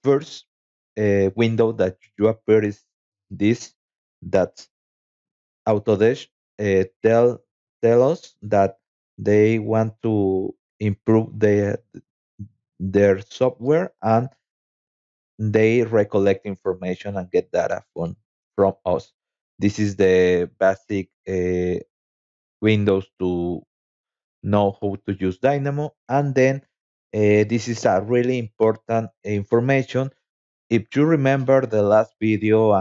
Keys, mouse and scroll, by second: 2.3-3.5 drag, 5.7-6.8 scroll down 6, 17.9 click, 18.5 click, 19.0 click, 19.3 click, 19.6 click, 20.8 click, 22.7 click, 26.2 click, 28.0-29.3 drag.